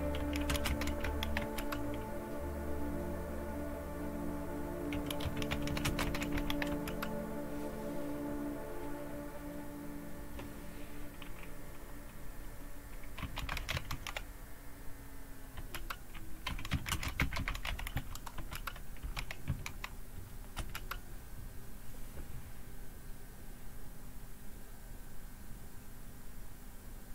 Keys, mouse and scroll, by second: 0.0-1.5 typing, 4.7-6.8 typing, 13.0-14.4 typing, 15.6 Return, 16.2-20.3 typing, 20.6 Return.